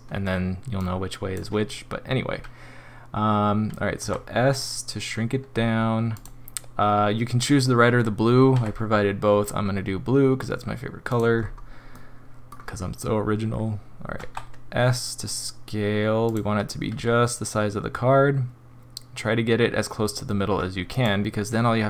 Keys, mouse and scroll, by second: 0.8 click, 4.0 s, 8.5 g, 11.4 scroll up 4, 11.9 middle click, 14.2 s, 16.9 g.